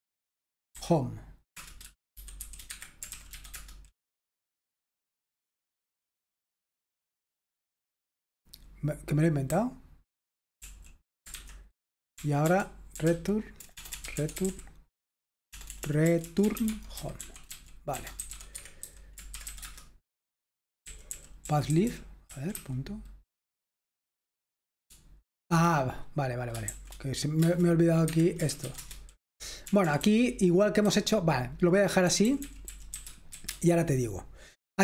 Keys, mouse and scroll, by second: 0.9 h, 1.5 Return, 2.2-3.5 typing, 2.7 Escape, 9.3-23.0 typing, 26.6 typing, 27.4 Return, 28.1 Escape, 28.2-33.9 typing.